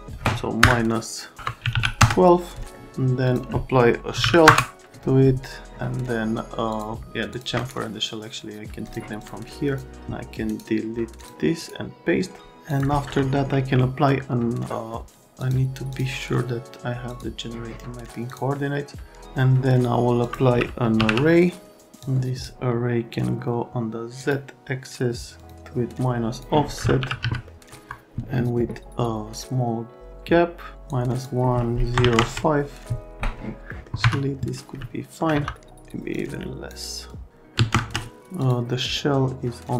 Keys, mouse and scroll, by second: 0.6 KP_Subtract, 1.4 BackSpace, 1.6 KP_1, 1.7 KP_2, 2.0 KP_Enter, 3.2 click, 3.9-4.7 typing, 6.7 click, 7.3 click, 7.5 scroll up 2, 8.8 click, 9.2 click, 9.6 click, 11.2 click, 12.6 click, 13.4 a, 15.4 click, 15.9 click, 17.1 click, 18.3 click, 20.2 click, 20.6-21.5 typing, 22.0 click, 24.2 click, 25.4 click, 25.6 click, 26.7-27.7 typing, 26.8 right click, 27.5 right click, 30.9 middle click, 31.9 KP_0, 32.0 KP_5, 32.2 KP_Enter, 34.0 F3, 35.3 F3, 35.5 middle click, 36.1 click, 37.1 click, 37.5 KP_3, 37.7 KP_Enter, 38.4 click, 39.6 click.